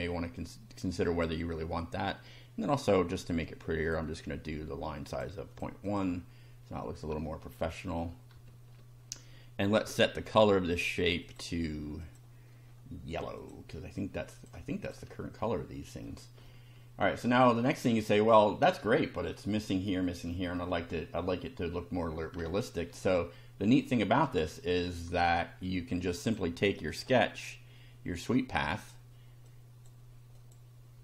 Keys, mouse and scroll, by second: 1.1 click, 3.8 click, 5.1 click, 5.5 click, 5.9 click, 6.6-7.1 scroll down 1, 7.5-8.2 shift+middle drag, 9.6 click, 11.2 click, 12.0 click, 13.4 click, 14.3 click, 14.9 click, 15.5-16.2 shift+middle drag, 16.5-17.4 shift+middle drag, 17.7 shift+middle click, 19.0 shift+middle click, 20.3 shift+middle click, 22.5 shift+middle click, 23.2 shift+scroll down 1, 23.8 shift+middle click, 24.7 middle click, 26.3 click, 26.9 click, 27.2-27.5 scroll down 1, 28.7 click, 29.5 click, 30.4 click.